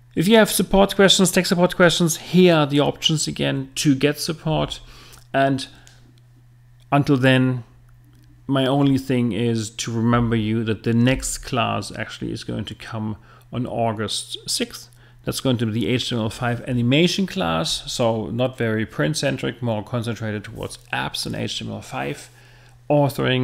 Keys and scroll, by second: 4.5 Right.